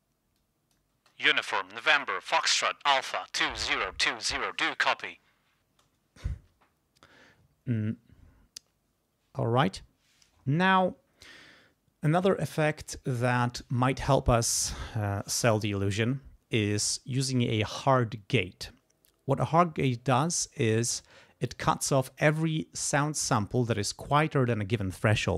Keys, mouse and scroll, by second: 0.4 click, 0.9 space, 1.4 click, 5.7 space.